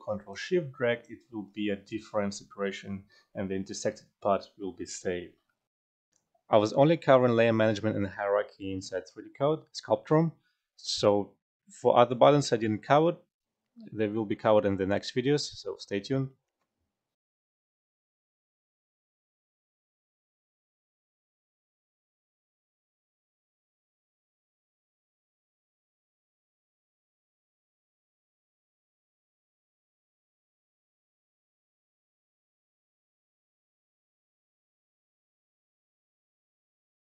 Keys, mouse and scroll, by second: 5.6 F12.